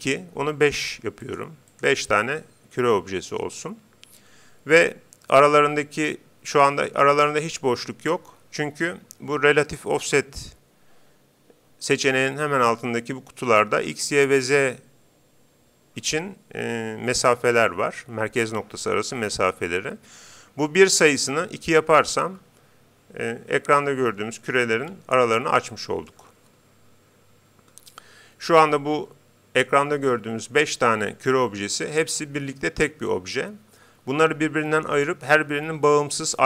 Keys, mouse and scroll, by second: 0.8-3.4 drag, 21.1-22.8 drag, 25.1-26.9 middle drag.